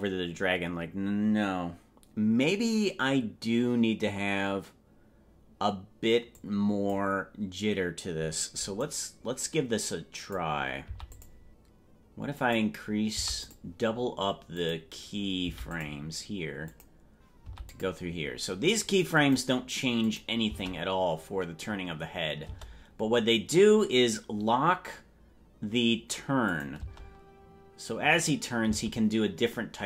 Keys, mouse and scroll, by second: 6.4 click, 8.8-10.4 drag, 10.9 i, 12.4 click, 14.6 click, 16.7 click, 18.7 click, 19.2 click, 20.1 click, 20.5 space, 22.5 space, 26.5 click, 26.9 space, 28.7 space.